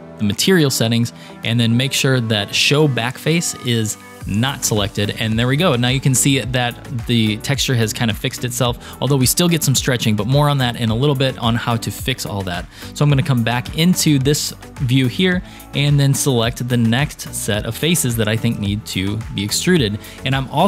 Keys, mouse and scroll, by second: 4.4 click, 7.5-8.9 middle drag, 11.2-12.3 middle drag, 12.9 KP_3, 14.0 scroll down 3, 14.7 shift+middle click, 16.6 shift+click, 17.6-19.4 shift+drag.